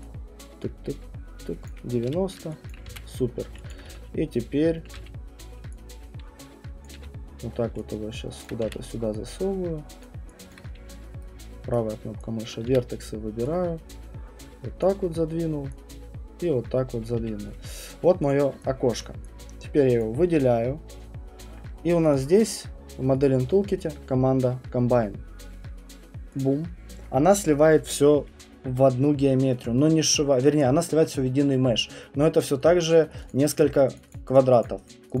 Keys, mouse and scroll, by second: 0.0-3.8 typing, 1.7 click, 2.7 alt+click, 2.9 alt+click, 3.0-3.4 scroll, 3.7 alt+click, 4.4 scroll, 4.6 middle click, 4.6 alt+right click, 4.8 alt+middle click, 5.0 w, 6.8 click, 6.9 f, 7.2 middle click, 7.5 middle click, 7.6 middle click, 8.4-9.1 typing, 8.5 alt+right click, 10.0 click, 10.5 alt+click, 10.7 middle click, 11.7 right click, 12.5 click, 12.7 r, 14.8 click, 17.0 click, 17.2 q, 17.8 right click, 18.3 click, 18.9 alt+click, 20.0 click, 22.2 click, 23.2 click, 26.4 click, 30.6-35.2 alt+click, 32.9 middle click, 33.2 click, 33.3 click, 33.6 click, 34.0 click, 34.1 click, 34.3 click, 34.6 click, 34.9 click.